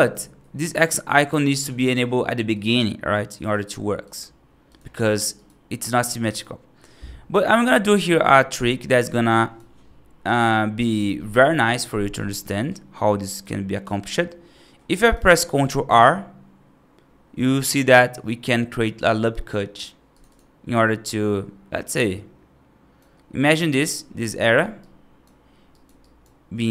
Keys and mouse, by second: 0.0 ctrl+z, 3.9 click, 5.0 click, 5.2 right click, 6.1 right click, 8.0 right click, 9.2 right click, 10.1 right click, 12.5 right click, 13.9 middle click, 14.8 right click, 15.7 ctrl+r, 20.9-22.9 right drag, 24.6 right click, 25.6 right click, 25.9 right click.